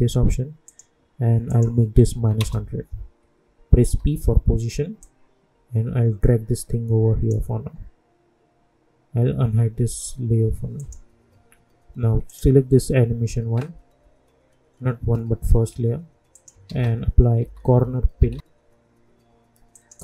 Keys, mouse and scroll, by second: 2.1 -, 2.4 Return, 3.8 p, 5.0-10.7 drag, 16.3 click, 16.6 ctrl+a, 17.4-18.8 typing.